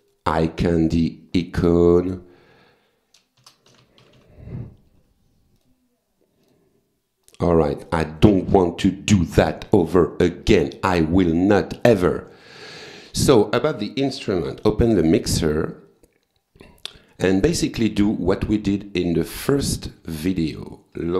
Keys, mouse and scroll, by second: 0.6 click, 1.8 click, 3.2-4.7 typing, 5.6 click, 6.5 click, 7.3 click, 8.1 click, 9.6 click, 10.0 click, 10.5 click, 10.9 click, 11.4 click, 12.4 click, 13.0 click, 14.5 F9, 15.8-17.1 drag, 18.0 click, 18.3 right click, 19.1 click, 20.3 click.